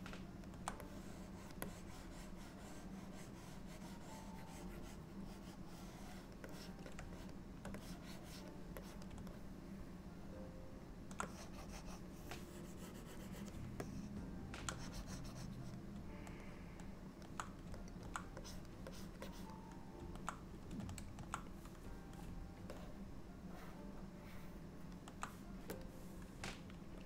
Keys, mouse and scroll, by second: 0.9 click, 1.7 click, 4.9 click, 6.6 click, 7.3 shift+click, 7.6 shift+click, 7.9 click, 8.9 click, 9.4 middle click, 11.3 click, 12.2 click, 13.9 middle click, 14.8 click, 16.5 middle click, 18.0 middle click, 18.5 click, 19.0 click, 19.4 click, 22.8 middle click, 25.9 click.